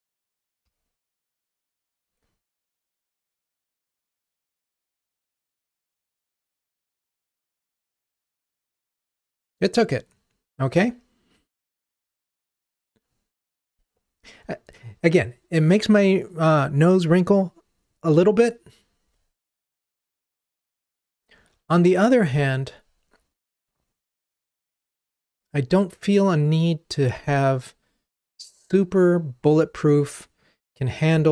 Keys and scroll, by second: 0.6 ctrl+r.